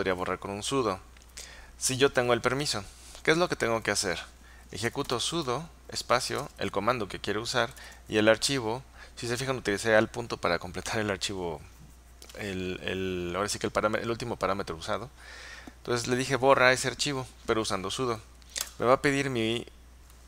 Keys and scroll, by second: 4.7-6.9 typing, 7.8 alt+., 18.7 Return.